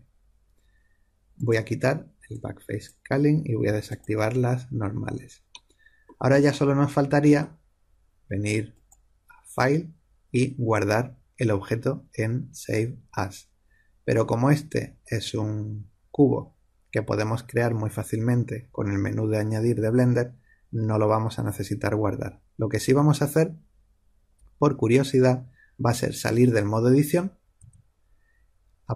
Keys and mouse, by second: 1.3-5.7 drag, 5.7-8.6 middle drag, 8.6 click, 15.2-26.0 middle drag, 27.6 Tab.